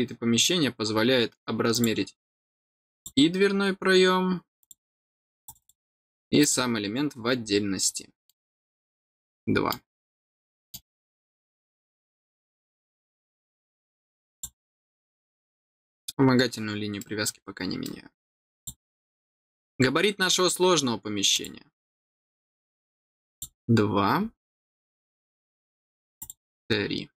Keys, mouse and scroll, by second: 0.1 scroll down 1, 0.8 middle click, 1.6 click, 2.9 click, 4.5 click, 5.4 click, 5.5 click, 6.3 click, 7.1-7.4 scroll down 2, 7.7 middle click, 8.3-8.7 scroll down 2, 9.0 middle click, 10.2 middle click, 11.9 middle click, 14.2 click, 16.9 middle click, 17.7 middle click, 18.5 click, 19.1 middle click, 19.8 scroll down 1, 21.2 click, 23.2 click, 26.1 click.